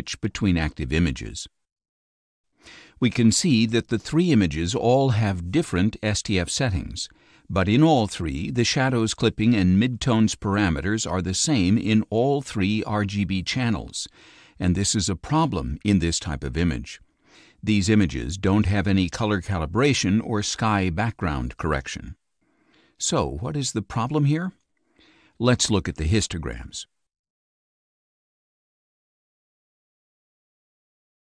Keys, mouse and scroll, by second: 3.2 click, 4.9 click, 5.9 click, 17.7 click, 26.9 click, 29.9-31.3 drag.